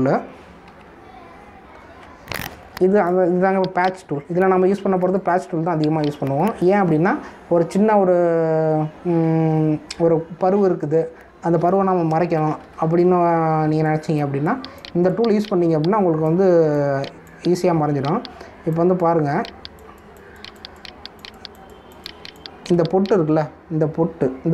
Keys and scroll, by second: 0.2 ctrl+Return, 1.6 ctrl+z, 13.3 ctrl+=, 14.6 space.